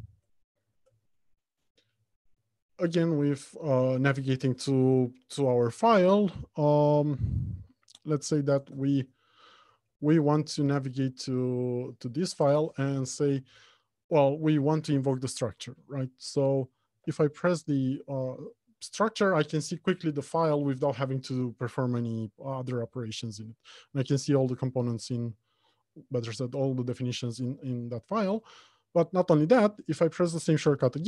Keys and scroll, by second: 12.8 ctrl+shift+n, 17.5 ctrl+F12.